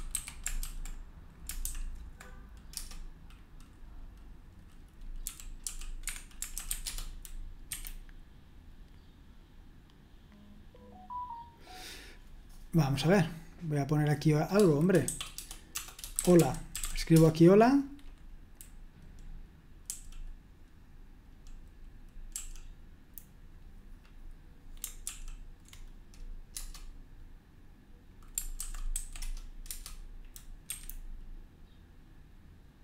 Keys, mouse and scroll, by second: 0.0-0.6 typing, 1.6 typing, 2.7 Return, 5.0-7.0 typing, 7.6 F5, 13.5-16.2 drag, 16.0-17.3 typing, 19.8 Right, 20.0 Right, 22.3 Right, 25.0 super+l, 26.5 Return, 28.7-29.4 typing, 29.7 Return, 30.6 F5, 30.6 typing.